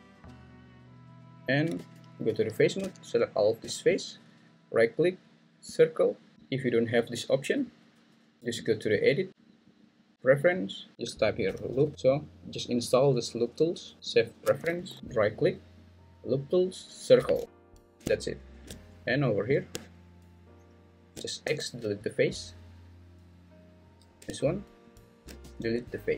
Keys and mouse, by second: 1.8 3, 4.8-5.7 drag, 6.3 Escape, 6.7-8.4 drag, 15.3-18.0 right drag, 21.4 x, 25.4 x.